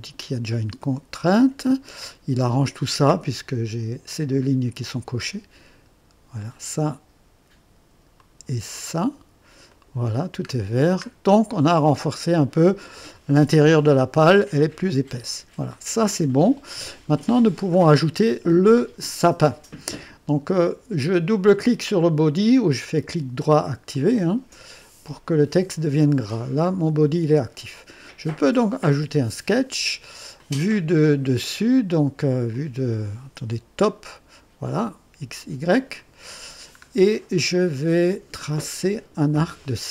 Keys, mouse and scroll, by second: 0.8-2.2 right drag, 6.4 click, 8.2 click, 9.7 click, 10.5-10.8 scroll down 2, 12.1 click, 13.9-16.4 drag, 17.7 click, 22.9 right click, 24.0 click, 28.9 click, 30.4-31.3 drag, 31.8 click, 32.5 click, 33.8 click, 36.0 click, 36.9-37.4 scroll up 3, 37.4-38.3 right drag.